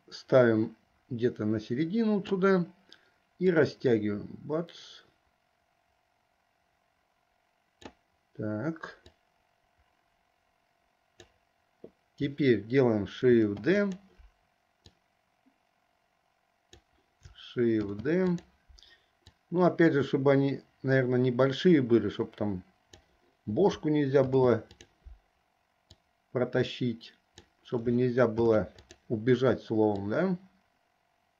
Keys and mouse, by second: 3.7-8.0 drag, 9.3-11.3 drag, 13.4 shift+d, 15.1-16.9 drag, 17.9 shift+d, 19.5-23.3 drag, 24.4 shift+d, 26.2-27.6 drag, 28.5 shift+d, 30.3-31.3 drag.